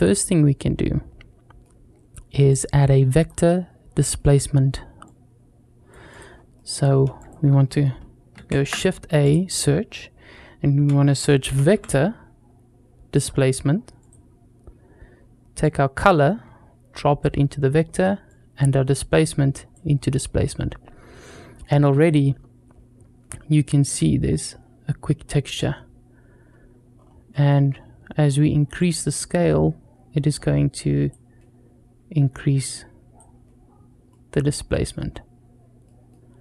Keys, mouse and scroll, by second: 2.3 click, 3.3-4.0 scroll down 3, 4.0 middle click, 4.9-6.2 drag, 6.2-6.7 scroll up 2, 6.4 middle click, 7.0 click, 8.2 shift+a, 15.4-17.0 drag, 18.1-19.8 drag, 20.9-21.5 middle drag, 23.1 scroll up 3, 24.7 scroll down 2, 26.8-28.3 scroll up 3, 27.1 middle click, 28.3-28.6 scroll up 1, 28.6-30.9 shift+drag, 32.5 click, 33.9 middle click, 34.9-35.2 scroll up 1, 35.7 middle click.